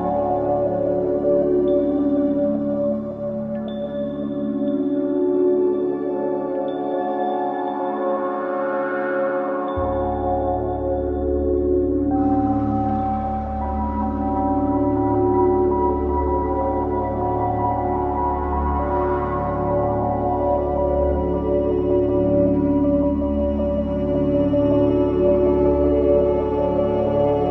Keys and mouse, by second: 1.3-3.8 typing, 7.5 click, 10.4 typing, 11.6 click, 12.5-13.2 typing, 12.7 click, 13.7 click, 14.8-16.6 typing, 15.6-16.5 drag, 17.6-18.4 drag, 21.3-21.7 typing, 22.5-23.6 drag, 23.7-24.6 typing, 24.2 click, 25.8-27.5 typing, 26.4 click.